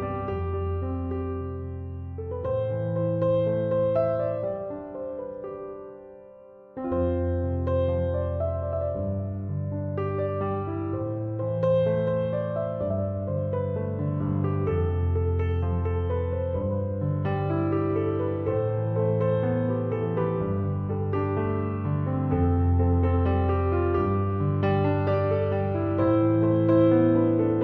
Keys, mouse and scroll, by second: 7.5 m.